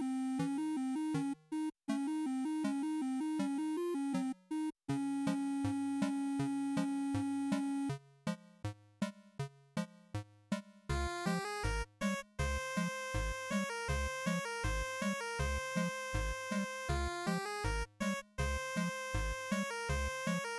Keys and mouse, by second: 1.3 middle click, 14.8-16.1 drag, 19.1-20.5 drag.